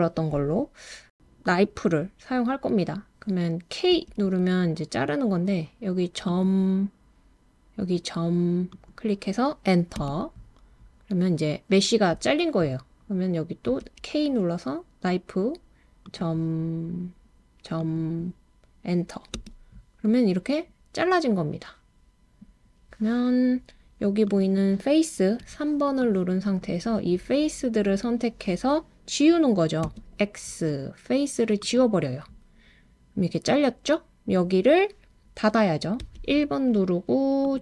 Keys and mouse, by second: 3.9 k, 13.7 k, 24.3 click, 25.4 3, 26.3 click, 29.8 x, 36.0 1, 37.4 click.